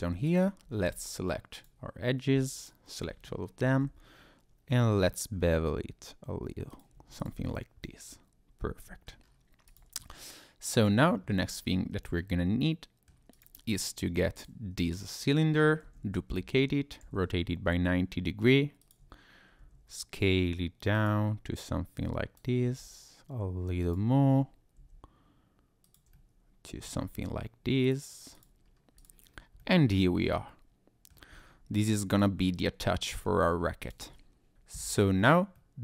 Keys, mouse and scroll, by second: 0.3 alt+click, 1.5 click, 2.6 alt+click, 3.6 ctrl+b, 6.7 click, 6.9 Tab, 7.2 click, 7.4-7.8 scroll down 1, 7.8 middle click, 7.8-8.4 scroll up 1, 9.2 scroll down 1, 9.7 click, 10.0 middle click, 11.2-11.5 scroll up 2, 11.5-12.2 scroll down 3, 12.1 scroll up 1, 12.2 middle click, 13.3 click, 14.3 click, 14.9-15.2 scroll up 2, 15.8 shift+d, 16.4 Escape, 17.0 r, 18.8 ctrl+click, 19.6 s, 20.9 click, 21.6 click, 22.6 s, 23.8 click, 24.8 s, 25.8 click, 26.1 middle click, 27.8 click, 28.3 click, 28.6-29.0 scroll down 2, 29.0 click, 29.2-29.8 scroll down 3, 29.6 middle click, 31.3-32.1 scroll up 2, 32.1 click, 32.9 middle click, 33.4 scroll down 1, 33.8 click, 34.1 middle click, 34.8-35.5 scroll up 4, 35.5 middle click.